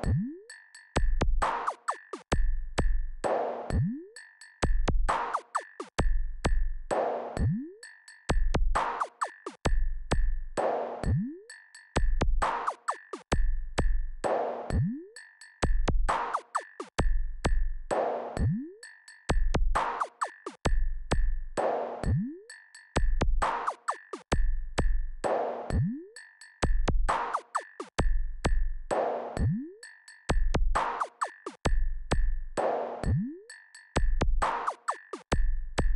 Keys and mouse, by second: 0.3 KP_6, 0.5 KP_6, 0.9 KP_6, 1.1 KP_6, 2.7 KP_4, 2.9 KP_4, 3.5 KP_4, 4.7 KP_2, 6.2 KP_8, 6.5 KP_8, 11.8 click, 13.7-17.3 drag, 22.2-25.9 drag, 27.5-35.3 drag.